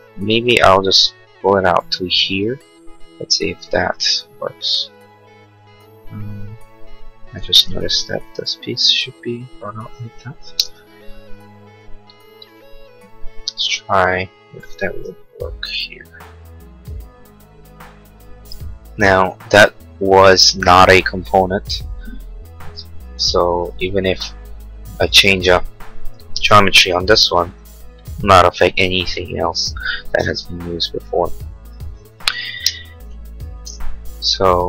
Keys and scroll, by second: 8.3 p, 10.4 space, 10.8 Escape, 13.3 m, 18.9 space, 23.2 Escape, 26.3 m, 30.4 Escape, 32.6 space, 33.3 Escape.